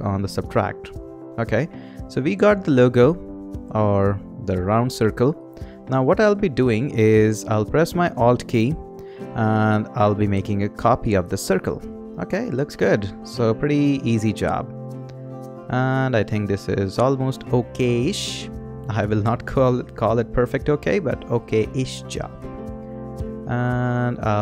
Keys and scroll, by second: 19.5 Down.